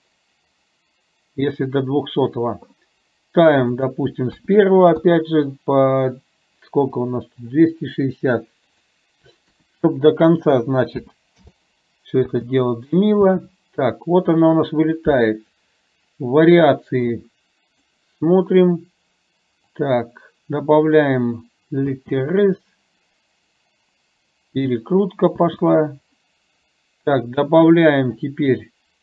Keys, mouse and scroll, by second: 3.8 click, 8.9 click, 12.3 space, 13.3 space, 15.5 click, 19.9 click, 22.0 space, 25.4 space.